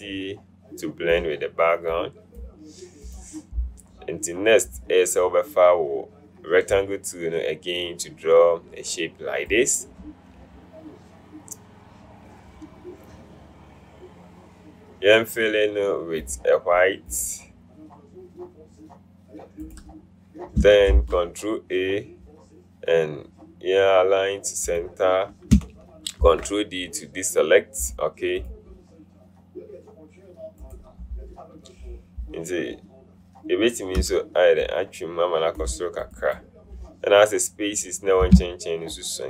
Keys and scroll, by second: 21.0 ctrl+a, 26.3 ctrl+d.